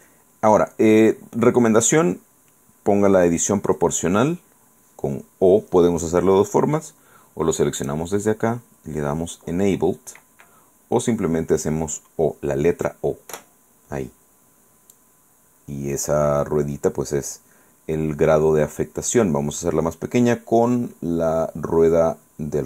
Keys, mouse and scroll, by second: 1.1-2.2 middle drag, 7.9 click, 13.4 o, 15.1-21.0 drag, 21.0-21.4 scroll up 1, 21.8-22.1 scroll up 1, 22.5 scroll up 1.